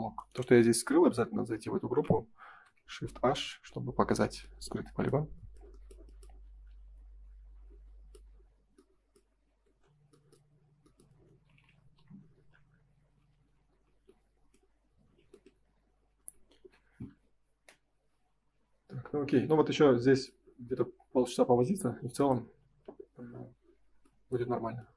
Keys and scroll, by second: 2.5 shift+h, 3.5 ctrl+s, 4.1 Escape, 9.4 ctrl+s, 11.9 F5, 16.1 ctrl+s.